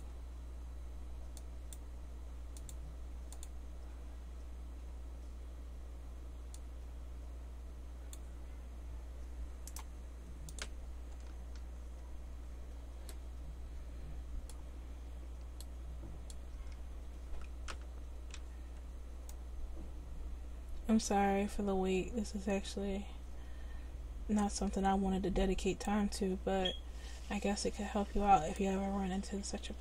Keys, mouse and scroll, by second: 10.5-11.6 drag, 11.6 Tab, 16.6 Tab, 18.4 c.